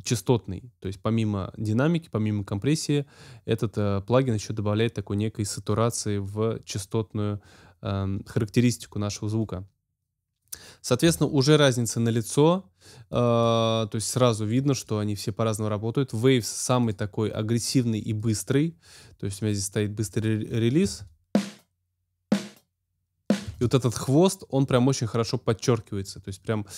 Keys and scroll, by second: 20.8 space, 23.4 space.